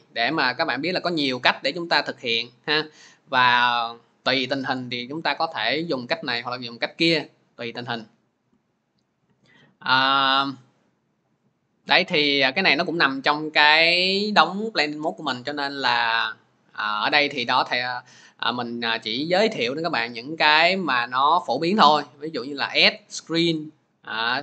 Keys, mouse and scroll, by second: 10.0 click, 10.7-15.1 drag.